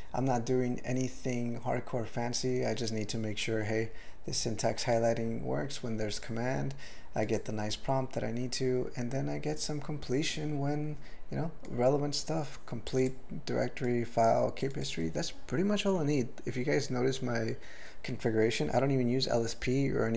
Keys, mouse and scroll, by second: 6.1 click, 7.3 click, 11.7 click, 12.9 click, 13.0 click, 13.8 click, 14.6 click, 14.7 click, 14.8 click.